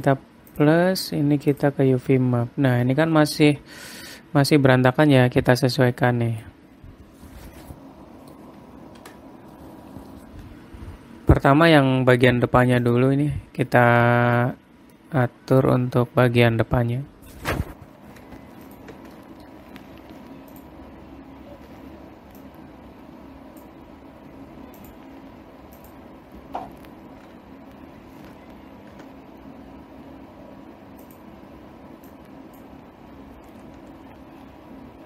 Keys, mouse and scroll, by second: 0.4 click, 1.1 click, 3.2 scroll down 2, 3.4 middle click, 4.2 scroll up 2, 6.4 middle click, 8.2 middle click, 9.6 Tab, 10.7 middle click, 13.4 click, 15.5 middle click, 19.2 shift+click, 19.8 middle click, 21.1 click, 21.7-22.1 scroll up 2, 23.0 click, 25.3 click, 28.2 scroll down 2, 29.5 u, 32.6 click, 34.3 s.